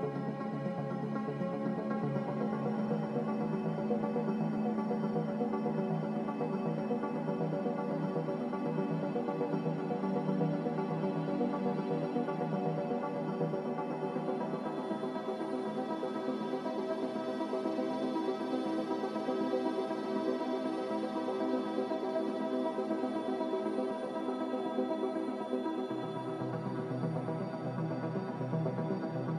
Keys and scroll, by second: 3.7 ctrl+z, 3.7-4.5 typing, 5.6 0.